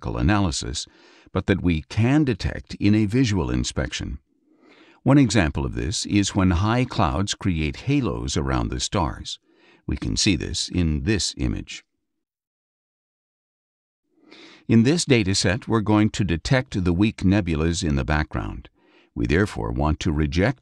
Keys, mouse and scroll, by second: 4.4 Up, 11.0 Up.